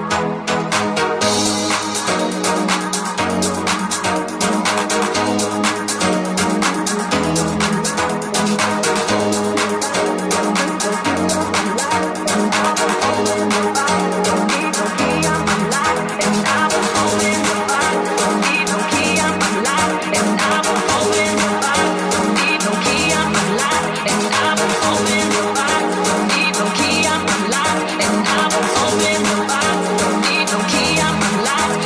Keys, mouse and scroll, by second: 0.0-3.3 drag, 5.8-7.3 ctrl+shift+drag, 6.6 Tab, 7.3 3, 7.6 click, 7.6 middle click, 7.6 right click, 7.8 shift+click, 7.8 shift+middle click, 7.8 shift+right click, 10.9 ctrl+middle click, 10.9 i, 11.3 ctrl+shift+middle click, 12.2 1, 12.3 middle click, 13.2 right click, 13.2-16.3 middle drag, 14.1 g, 16.3 right click, 16.4-20.0 middle drag, 17.7 g, 20.0 right click, 20.1-22.1 middle drag, 22.1 shift+middle click, 22.5-26.5 shift+middle drag, 22.7 g, 26.5 shift+right click, 26.5 shift+middle click, 26.7 shift+right click, 26.7-29.7 shift+middle drag, 27.7 g, 30.1 alt+e, 31.5 shift+middle click.